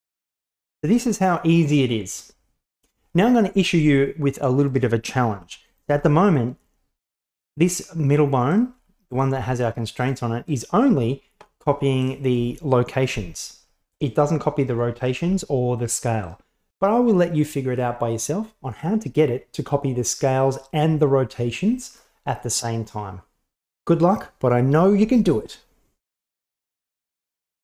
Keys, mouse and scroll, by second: 0.0 g, 0.4 click, 0.6 g, 4.7 right click, 5.3 g, 5.9 r, 8.5 right click, 8.8 g, 9.3 r, 10.5 right click, 13.1 s, 15.0 right drag, 15.3 r, 16.3 right click.